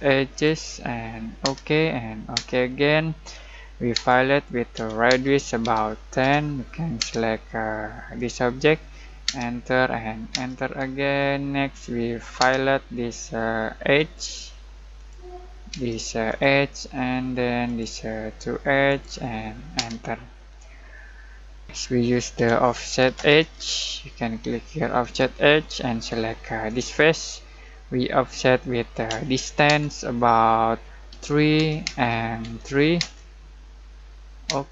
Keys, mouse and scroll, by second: 0.3 click, 1.4 space, 4.7-7.0 typing, 8.1 click, 9.2 space, 12.4 space, 13.9 click, 15.7 space, 16.2 click, 19.7 space, 22.3-24.0 typing, 25.0 click, 29.1 d, 29.7 space, 31.1 3, 31.8 space, 32.4 3, 32.9 space.